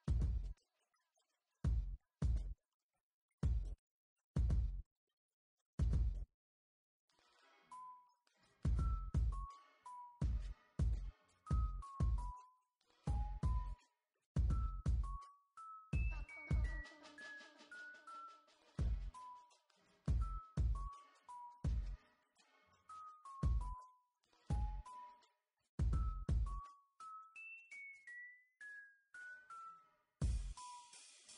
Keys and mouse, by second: 0.5 KP_1, 1.5 Tab, 1.7 Tab, 2.6-3.0 Tab, 6.8 ctrl+z, 7.5 Tab, 7.8 Tab, 8.6 Tab, 10.4 KP_1, 11.5 b, 13.1 b, 13.6 b, 13.8 middle click, 17.5 z, 17.8 b, 20.5 click, 21.0 ctrl+z, 22.0 z, 23.8-24.9 middle drag, 28.8 middle click, 29.3 Tab, 29.5 m, 30.2 click, 30.6-31.3 typing.